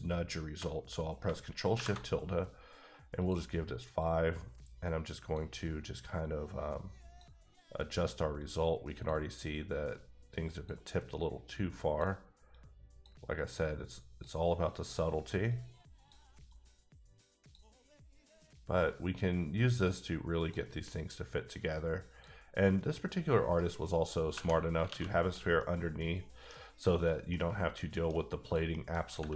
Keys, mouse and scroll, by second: 1.7 shift+`, 2.6-2.9 scroll up 1, 3.2 click, 4.0 click, 6.5 click, 8.4 click, 9.5 click, 11.8 click, 12.5 click, 13.6 click, 15.8 click, 16.5 click, 19.1 click, 21.5 click, 22.9-23.5 scroll down 1, 23.5 right click, 23.9 middle click, 24.9 alt+a, 25.1-25.6 scroll down 1, 25.6 middle click, 25.8 middle click, 26.5 scroll down 1, 27.3 middle click, 28.4 click, 28.7 middle click, 29.0 scroll up 2.